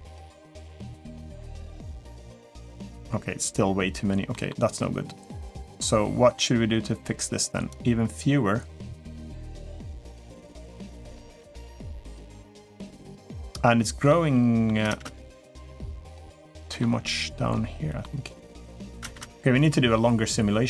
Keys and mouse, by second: 0.0 click, 1.2 Tab, 1.7-2.8 middle drag, 4.1 middle click, 7.5-10.2 drag, 10.5-12.0 middle drag, 12.5-13.4 middle drag, 13.9-14.5 middle drag, 14.7 space, 15.3-16.6 middle drag, 17.3-17.8 middle drag, 18.2 middle click, 19.3 space.